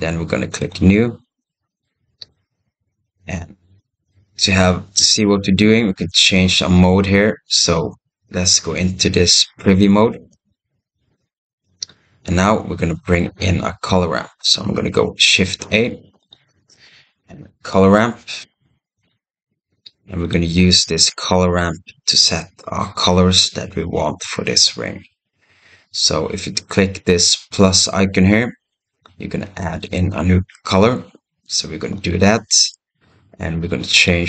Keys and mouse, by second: 0.5 click, 1.2 click, 3.9-4.9 drag, 10.3 right click, 15.5 shift+a, 22.3 middle click, 31.8 click, 33.8 click.